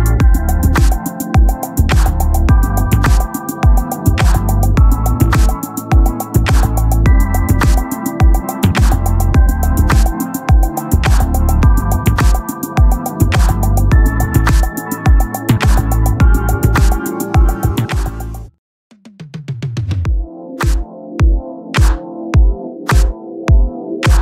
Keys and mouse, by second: 1.5 click, 13.5 click, 15.4 click, 21.6 click, 23.0 ctrl+-.